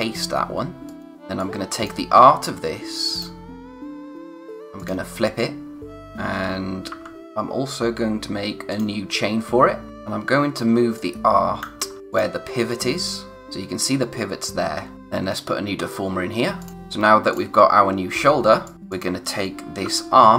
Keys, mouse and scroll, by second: 0.8 click, 6.9 b, 7.2 click, 14.2-14.9 scroll up 1, 14.9 click, 16.6 click, 16.7-17.3 scroll down 1, 17.3 click, 17.6-18.0 scroll down 1, 18.6 click, 19.8-20.3 typing.